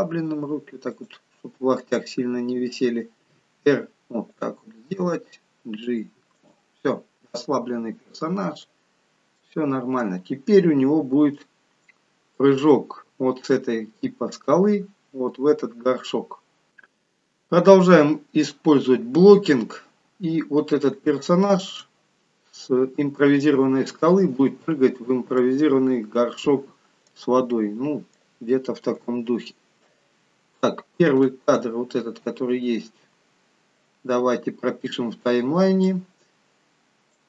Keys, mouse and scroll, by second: 2.0 click, 3.2 r, 4.9 g, 7.3 middle click, 9.0 scroll down 2, 9.3 middle click, 10.3-11.1 scroll down 1, 11.4 shift+middle click, 11.4-12.0 scroll down 2, 13.4-14.1 scroll down 1, 16.1 middle click, 21.0 shift+middle click, 21.0 scroll down 8, 22.3-23.8 scroll up 3, 25.1 scroll down 1, 25.4 middle click, 29.0 KP_3, 30.3 scroll up 3, 31.2 shift+middle click, 36.6 click.